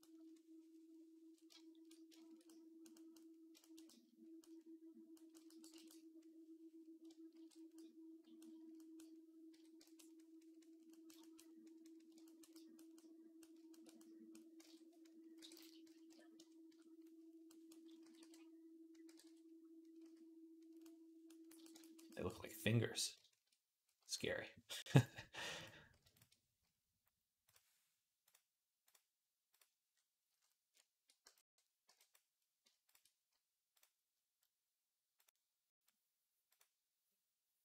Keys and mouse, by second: 0.0-7.7 ctrl+drag, 7.2 ctrl+r, 9.4 j, 12.3-14.9 drag, 14.5 ctrl+Tab, 14.9-24.9 middle drag, 15.2 r, 17.9 s, 18.9 g, 19.8 s, 24.9-29.8 right drag, 28.1-29.4 drag, 28.1-29.4 middle drag, 29.9-37.6 right drag, 31.1 b, 31.7 b, 35.2-36.4 drag.